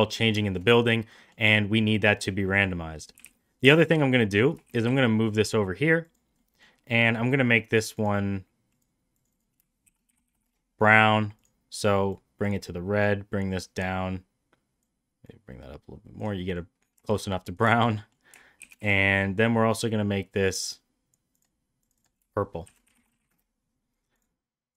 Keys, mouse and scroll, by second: 0.0 middle click, 0.4 shift+middle click, 0.7 middle drag, 1.2 middle drag, 2.2 click, 2.5 middle click, 3.2 g, 4.2 middle drag, 4.7 shift+d, 6.4 middle drag, 9.1 click, 9.3-11.0 drag, 16.4 middle drag, 17.0 shift+middle drag, 17.2 middle drag, 17.7 shift+middle drag, 18.0 middle drag, 18.6 shift+d, 21.4 click, 21.8 click, 22.0-23.8 shift+drag, 24.1 drag.